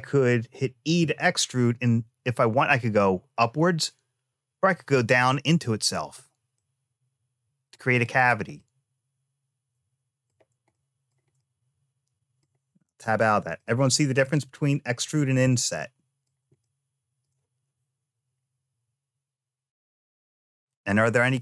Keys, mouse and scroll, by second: 0.6 e, 6.3-7.5 middle drag, 7.8 click, 8.3-10.0 middle drag, 10.5 shift+middle click, 11.0 shift+scroll down 1, 11.1 scroll up 1, 11.2-12.2 middle drag, 12.6 Tab, 13.3 shift+middle click, 14.8-15.3 scroll down 1, 15.3 middle click, 15.3 scroll down 1, 16.4 shift+middle click.